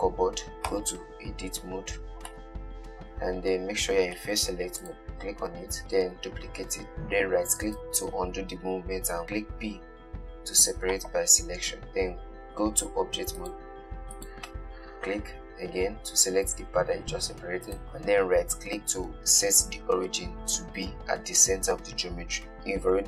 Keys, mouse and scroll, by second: 0.0-1.0 middle drag, 1.0 Tab, 2.1-2.6 scroll down 2, 2.6-5.1 middle drag, 5.1 click, 6.1 shift+d, 9.8 p, 12.8 Tab, 13.6 click, 14.4 click, 16.8 g, 17.8-19.7 right drag.